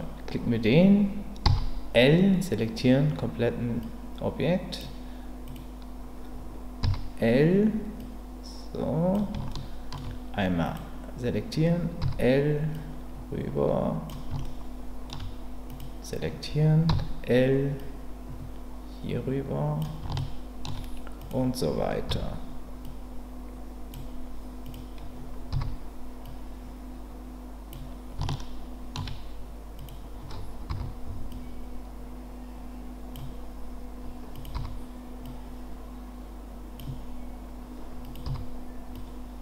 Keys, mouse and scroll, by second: 1.4 l, 3.9 click, 6.8 l, 8.0-9.1 drag, 9.5 shift+middle click, 12.0 l, 12.7-14.1 drag, 14.4 shift+middle click, 15.7 click, 16.9 l, 17.8-19.8 drag, 20.1 shift+middle click, 21.2 click, 22.1 l, 22.8-23.9 drag, 25.5 l, 26.2-27.7 drag, 28.3 shift+middle click, 30.7 l, 31.3-33.1 drag, 34.5 l, 35.2-36.8 drag, 38.2 l, 38.9-39.4 drag.